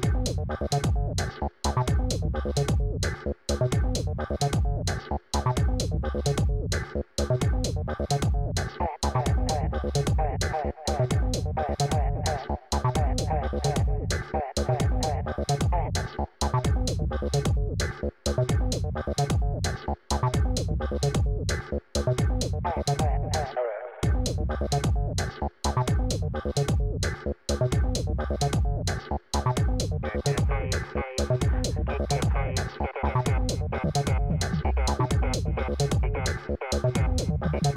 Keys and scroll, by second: 4.9 d, 5.3 e, 11.5 Return.